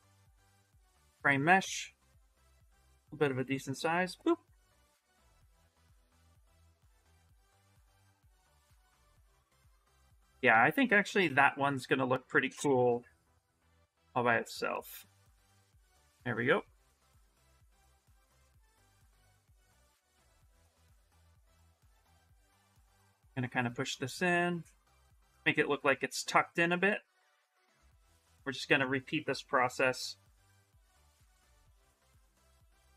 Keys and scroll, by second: 2.0 s, 4.8 shift+f, 7.0 ctrl+z, 13.4 shift+f, 13.8 shift+f, 19.1-21.0 typing.